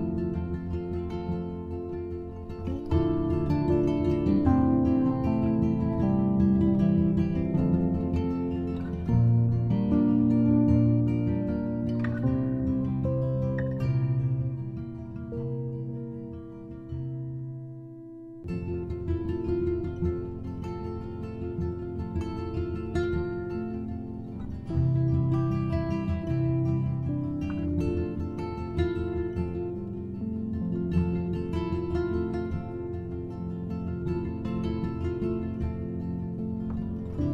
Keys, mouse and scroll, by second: 0.0 shift+d, 2.3 shift+a, 9.4 click, 12.5 click, 13.7 click, 19.4-25.2 drag, 26.5 KP_0, 30.2-30.8 scroll down 1, 34.8-36.9 drag, 36.9 scroll up 3.